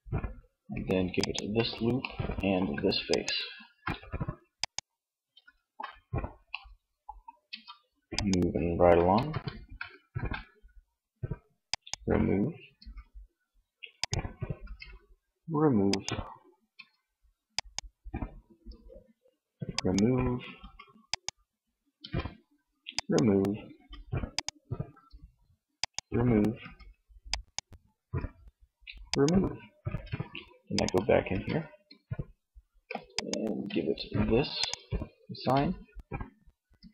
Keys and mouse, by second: 1.1-2.2 drag, 3.6 middle click, 6.7 Tab, 8.3 Tab, 8.8 a, 9.2 a, 11.9 Tab, 13.8 Tab, 15.8 Tab, 17.7 Tab, 19.6 Tab, 21.2 Tab, 22.8 Tab, 24.0 Tab, 25.7 Tab, 27.1 Tab, 30.5 Tab, 34.3 Tab, 35.9 Tab.